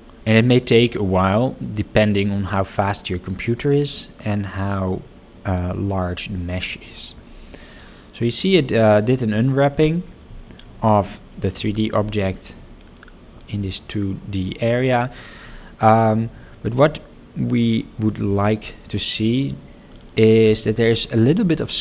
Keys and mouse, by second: 9.6 shift+middle click, 10.5 shift+middle click, 11.1 shift+middle click, 11.7 shift+middle click, 12.4 shift+middle click, 16.7 shift+middle click, 18.3 shift+middle click, 20.6 shift+middle click, 21.4 shift+middle click.